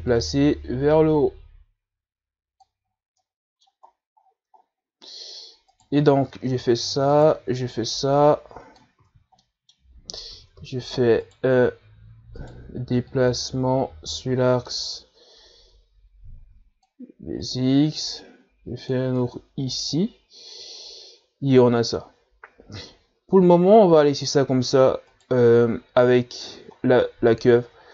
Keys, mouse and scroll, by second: 0.0-1.4 scroll up 2, 1.4-4.2 drag, 4.2 scroll down 2, 4.4 middle click, 5.2-6.8 scroll down 10, 7.0 right click, 8.4 shift+right click, 9.4 click, 10.3 ctrl+z, 10.6 middle click, 11.6 s, 13.7 right click, 14.3-17.4 drag, 18.7 right click, 19.3-20.5 drag, 20.5 Tab, 20.8 a, 21.2-24.8 middle drag, 24.8-25.4 scroll down 1, 25.5-26.4 scroll up 4, 26.4 right click.